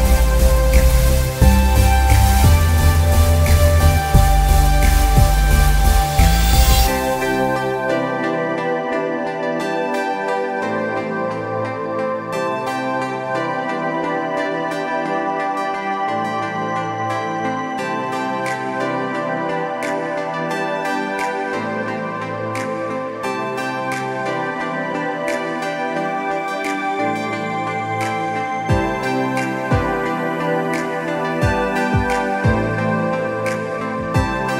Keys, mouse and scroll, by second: 1.2 click, 1.7 scroll up 1, 2.2 click, 3.6 click, 5.7 click, 7.5 click, 10.9 click, 16.4 click, 19.1 click, 23.4 click, 23.8 z, 24.1 click, 24.4 alt+scroll down 2, 24.8 click, 25.1 scroll up 1, 26.3 click, 28.2 click, 30.7 click.